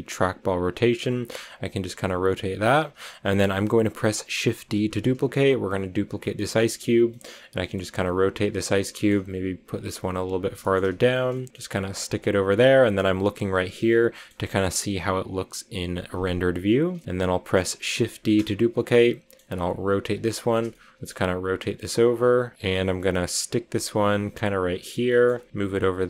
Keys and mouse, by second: 1.4 click, 1.8 g, 2.1 click, 3.0-4.3 middle drag, 4.7 shift+d, 7.6 click, 7.7 r, 8.4 click, 8.6 click, 9.0-11.9 typing, 9.6 click, 10.2 click, 10.9 click, 11.2 click, 11.8 click, 12.2 click, 16.0 click, 16.9-17.4 drag, 18.1 shift+d, 18.9 click, 19.3 r, 20.0 click, 20.9 click, 21.0 r, 21.7 click, 22.3-24.1 typing, 23.4 click, 23.9 click, 24.5 click, 25.1 click, 25.2-26.0 typing, 25.4 click, 25.6 click, 25.8 click.